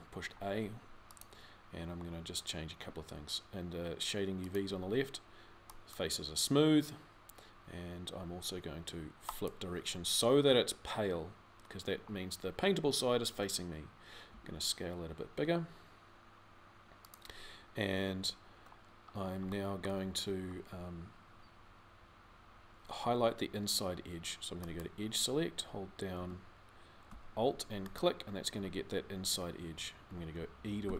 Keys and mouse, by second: 20.6 middle click, 26.0 a, 30.6 e.